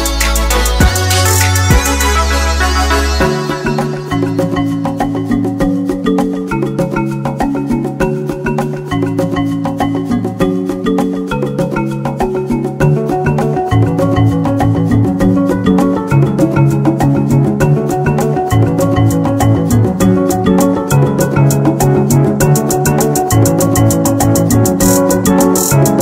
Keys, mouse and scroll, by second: 3.0 click, 3.6 r, 3.9 z, 12.6 click, 13.4 g, 14.0 x, 19.2 click, 19.6-22.9 middle drag, 23.0-23.4 scroll down 1, 23.6-24.0 scroll down 2, 24.6 click.